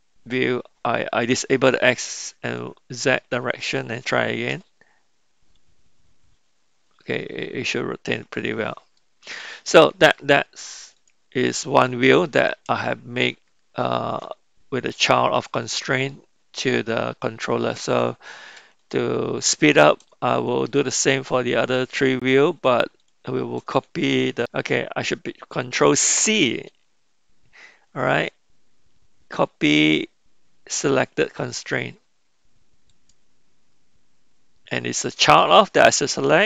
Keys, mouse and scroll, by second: 4.5 r, 9.0-10.3 middle drag, 10.9 click, 12.1-13.2 middle drag, 20.7 shift+click, 21.9 shift+click, 26.1 ctrl+c.